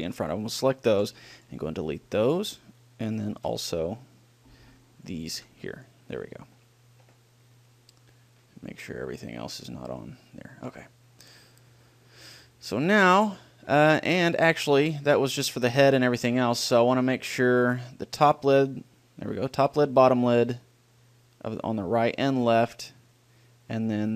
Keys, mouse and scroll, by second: 1.2 Delete, 3.7 b, 5.6 Delete, 8.9-12.4 drag, 8.9 middle click, 12.4-13.4 middle drag, 16.9 a, 17.3-19.1 right drag, 19.7-21.5 drag, 22.3-24.1 drag.